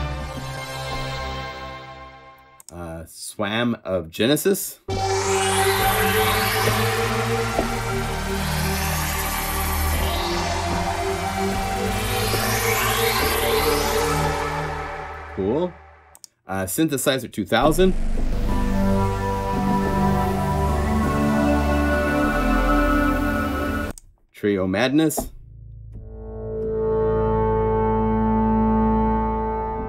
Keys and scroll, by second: 9.8 F1, 9.8 F2, 9.8 F4, 11.3-13.7 typing, 22.2 F2.